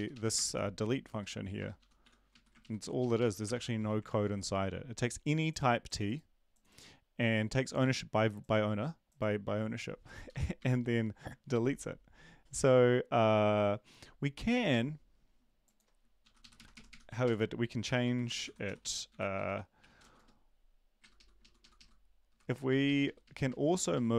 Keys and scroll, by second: 0.1 Up, 0.3 Return, 0.5 ctrl+v, 1.8 Up, 1.8 BackSpace, 2.0 Home, 2.3 Right, 3.0 shift+Left, 3.2 shift+Left, 3.5 BackSpace, 3.7 Down, 16.5 Up, 16.5 Right, 16.7 Right, 16.9 Right, 17.6-20.3 typing, 19.4 ctrl+Left, 21.0 ctrl+Left, 21.1 ctrl+Left, 21.7 ctrl+Left, 22.3 Delete, 22.5 Right, 23.0 ctrl+Right, 23.9 Right.